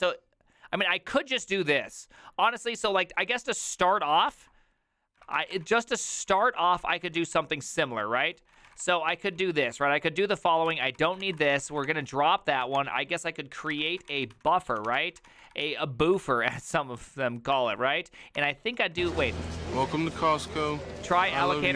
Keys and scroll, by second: 4.4 alt+{, 5.2-16.5 typing, 17.5-19.2 typing, 21.6-21.7 typing.